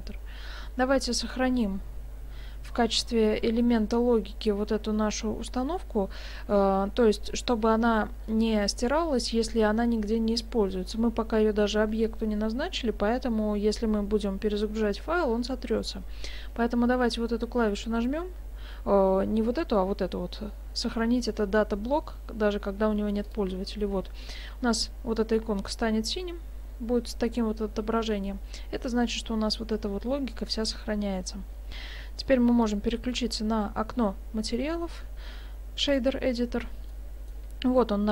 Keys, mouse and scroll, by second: 23.3 click, 32.6 click, 36.9 middle click.